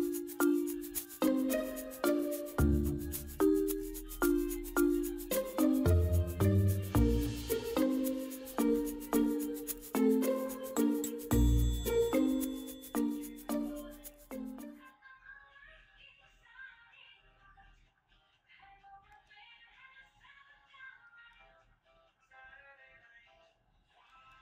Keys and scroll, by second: 5.3 ctrl+g.